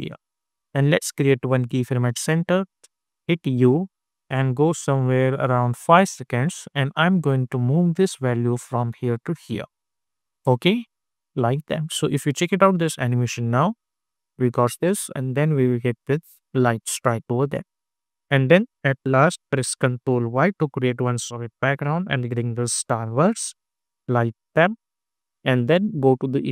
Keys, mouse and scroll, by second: 3.2 u, 4.3-11.1 drag, 11.1 space, 17.7 space, 18.1 click, 19.5 ctrl+y, 20.7 Return, 21.8-26.5 drag.